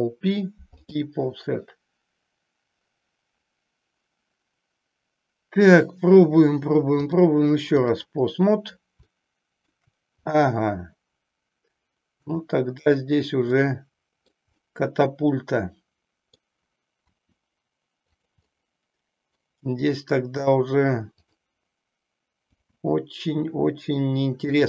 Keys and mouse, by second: 7.2 click, 9.0 shift+middle click, 12.3-14.2 drag, 14.7-16.4 middle drag, 17.0 r, 18.5 middle click, 21.3-23.0 drag, 23.2 g, 24.5 click.